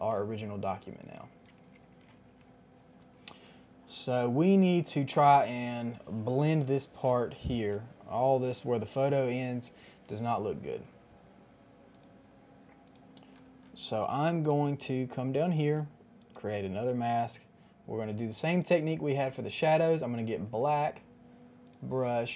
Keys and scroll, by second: 2.1 Return.